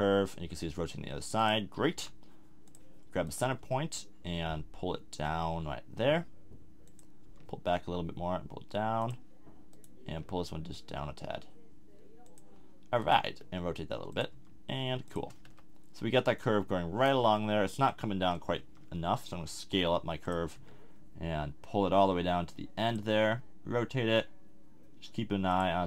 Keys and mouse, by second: 1.9 g, 3.6 g, 7.2 g, 10.1 g, 13.4 r, 14.3 g, 15.4 z, 16.5 z, 17.2 z, 18.6 s, 20.5 g, 23.1 r.